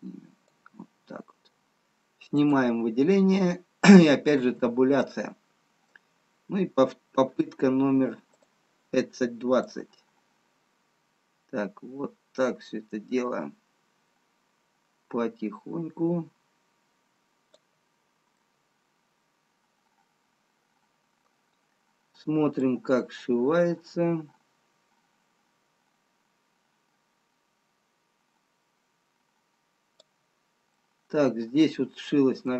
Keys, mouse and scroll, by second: 1.7 middle click, 2.7 click, 5.0 Tab, 5.0 middle click, 9.7 click, 10.6 click, 19.2 middle click, 24.2 click, 30.8 middle click.